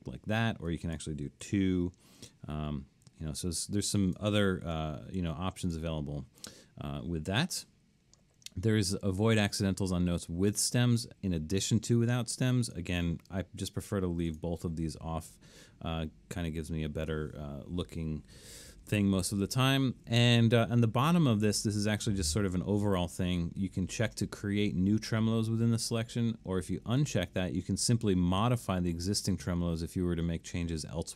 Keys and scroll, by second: 1.5 2, 4.7 3.